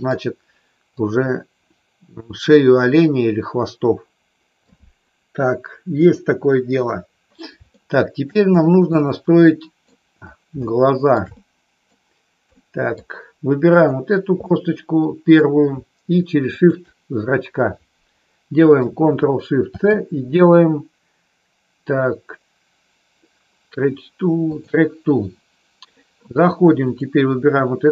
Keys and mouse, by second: 0.8-4.5 drag, 7.7 shift+middle click, 8.8-9.8 middle drag, 10.6 shift+middle click, 11.3 middle click, 12.6 middle click, 14.5 middle click, 16.6 shift+click, 26.8 click.